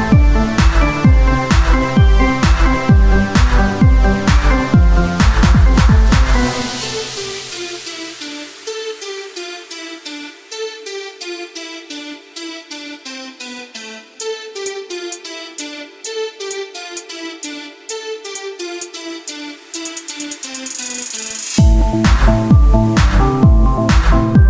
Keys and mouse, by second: 0.8 ctrl+r, 2.8 Tab, 9.5 ctrl+r, 12.9 click, 13.5 z, 15.5 s, 17.6 Tab, 20.6 KP_1, 21.6-23.0 drag, 23.0 middle click, 23.2-24.4 right drag, 23.4 z, 23.7 c.